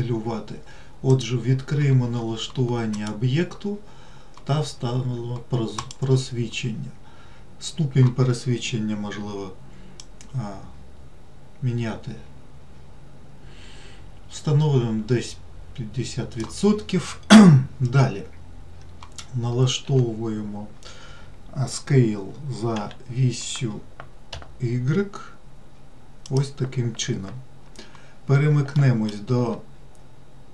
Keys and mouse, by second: 1.4-17.1 drag, 20.2 s, 29.2 alt+middle click.